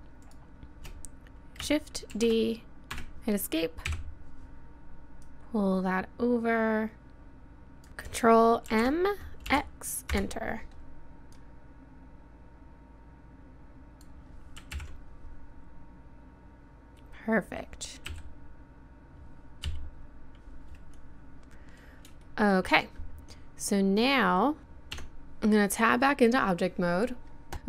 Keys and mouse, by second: 2.1 shift+d, 3.9 KP_7, 5.2-7.0 middle drag, 7.0 click, 8.7 ctrl+m, 11.4-13.4 drag, 14.7 ctrl+KP_1, 18.1 KP_7, 19.7 KP_3, 22.0-23.0 middle drag, 24.6 a, 25.0 Tab, 26.1-27.5 middle drag, 27.5 a.